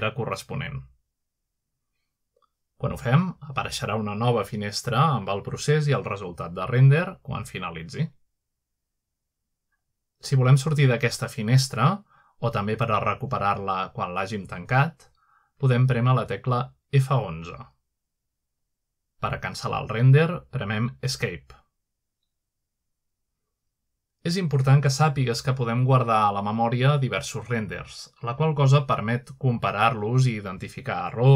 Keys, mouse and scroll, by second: 0.0 F12, 3.6-9.9 drag, 13.8 scroll down 1, 15.3 click, 16.7 F11, 18.2 F12, 19.4-20.3 scroll up 1, 20.2-22.6 middle drag, 20.8-22.1 scroll down 1, 22.6-24.3 drag, 25.5-26.7 scroll down 1, 26.9-27.7 scroll up 1, 28.1 F11, 28.9-29.3 scroll up 1, 29.3 scroll down 1, 30.3 scroll up 1, 30.9-31.2 scroll up 1.